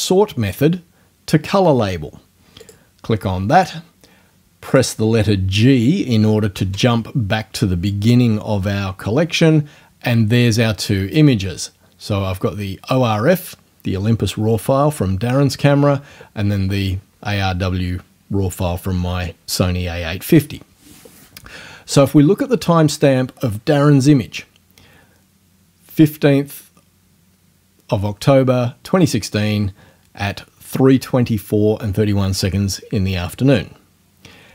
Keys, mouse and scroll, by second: 2.6 click, 4.7 click, 6.6 g, 22.0 click.